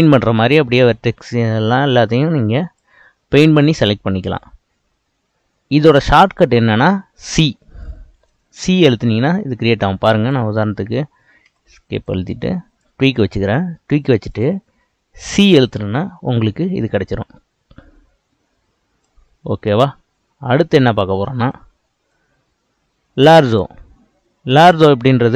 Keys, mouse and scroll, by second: 3.5-6.6 scroll up 2, 7.3 c, 12.0-14.4 drag, 15.5 c, 22.1-24.1 drag, 24.1-24.7 scroll down 3, 24.7 click.